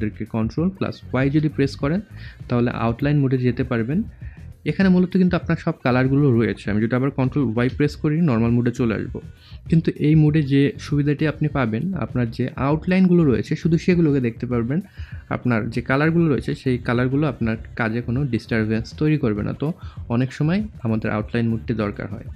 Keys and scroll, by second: 1.1 ctrl+y, 7.3 ctrl+y, 9.4 ctrl+y.